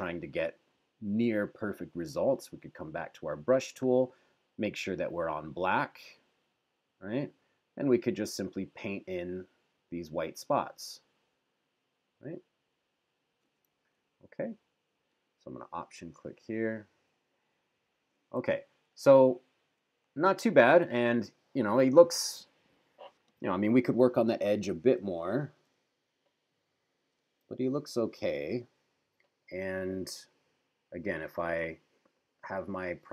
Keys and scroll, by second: 14.0 super+-, 18.6 super+=, 20.0 super+-, 25.2 super+=, 27.6 super+-.